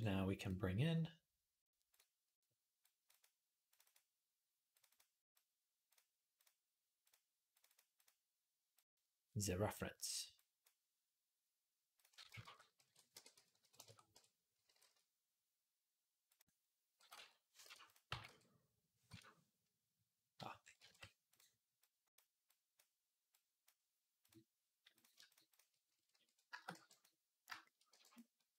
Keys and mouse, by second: 12.2 alt+g, 12.6 alt+r, 13.9 KP_1, 14.5 g, 16.8 g, 17.8-24.7 middle drag, 17.9 g, 24.7 click, 24.8 shift+middle click, 25.1 shift+click, 25.3-27.3 alt+shift+middle drag, 26.5 b, 27.3 shift+click, 27.6 middle click, 27.7 b, 28.3 alt+click, 28.5 alt+g.